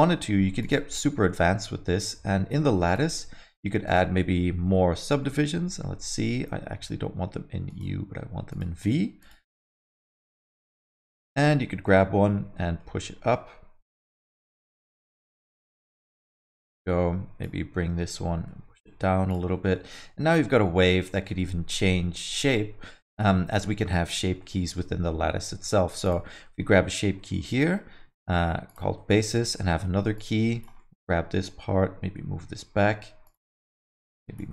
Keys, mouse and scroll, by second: 0.0 alt+middle click, 0.6 click, 1.0 Tab, 1.3 alt+middle click, 2.9 click, 3.8 click, 5.2 alt+middle click, 6.0-6.7 scroll up 2, 7.7 click, 8.5 click, 8.8 click, 9.2 click, 9.5 alt+middle click, 9.8 middle click, 10.1 alt+middle click, 10.4 middle click, 10.8 click, 11.2 alt+middle click, 12.5 middle click, 13.7 g, 16.2 middle click, 16.8 click, 18.1 g, 19.5 middle click, 19.7 alt+middle click, 20.3 Tab, 20.5 alt+middle click, 21.2 alt+middle click, 21.9 Tab, 22.1 alt+middle click, 23.8 middle click, 24.1 Tab, 24.4 alt+middle click, 26.0 click, 26.4 middle click, 26.8 alt+middle click, 27.2 alt+middle click, 28.7 click, 28.9 middle click, 29.2 alt+middle click, 29.5 Tab, 29.6 middle click, 30.1 click, 30.8 alt+middle click, 31.7 g, 33.5 middle click, 34.0 click.